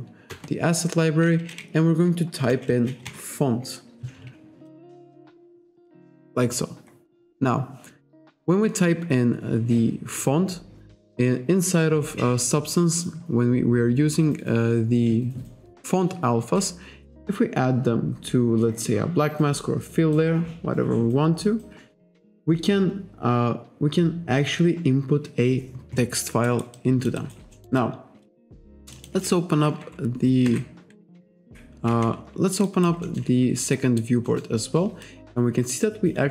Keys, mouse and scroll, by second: 0.3 BackSpace, 2.3-3.6 typing, 4.7 click, 6.5-6.9 scroll down 1, 6.9-7.3 scroll up 1, 17.1 click, 21.5-21.9 scroll down 1, 22.0-22.4 scroll down 1, 26.5 alt+right click, 26.8 alt+click, 27.2 alt+right click, 27.5 alt+middle click, 28.9 alt+shift+click, 30.5 F2, 31.0 F3, 31.4 F1, 32.7 alt+right click, 33.0 alt+middle click, 33.7 alt+right click, 34.3 alt+middle click, 35.0 click.